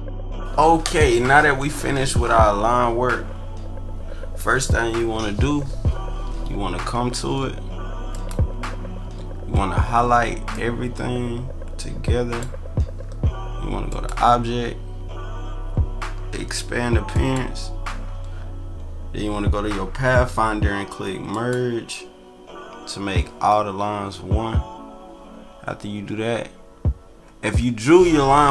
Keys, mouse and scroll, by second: 10.5-12.3 drag, 13.9 click, 17.1 click, 21.3 click.